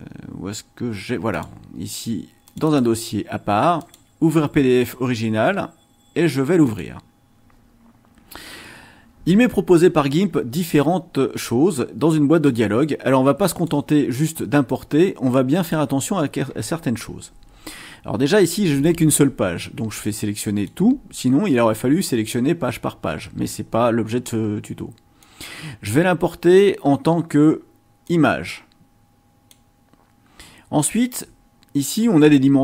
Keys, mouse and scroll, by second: 1.3 click, 2.4 click, 3.7 click, 6.6 click, 12.4-13.8 drag, 14.7-15.9 drag, 20.4 click, 25.2 click, 28.1-29.7 drag.